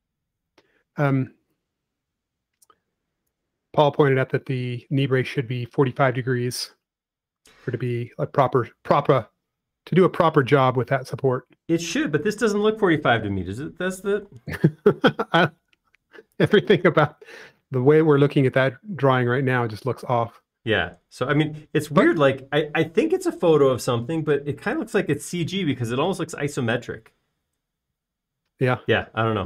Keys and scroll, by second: 0.8 BackSpace, 1.7 e, 5.4 space, 16.8 i, 19.9 space.